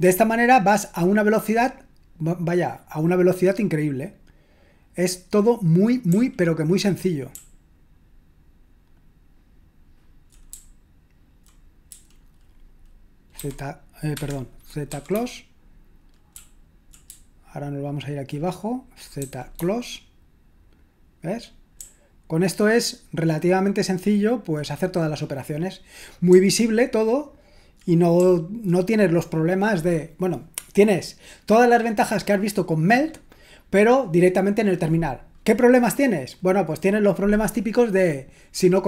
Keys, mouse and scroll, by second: 6.0-11.9 typing, 13.4 c, 14.1 Escape, 14.9 z, 16.3-19.5 typing, 21.8-24.5 typing, 26.3-28.1 typing.